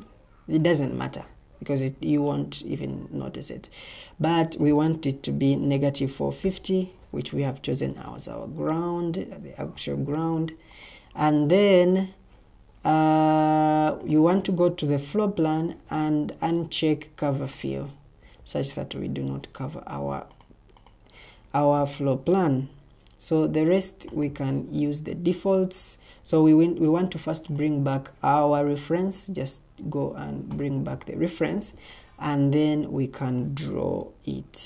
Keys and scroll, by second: 5.3-6.9 typing.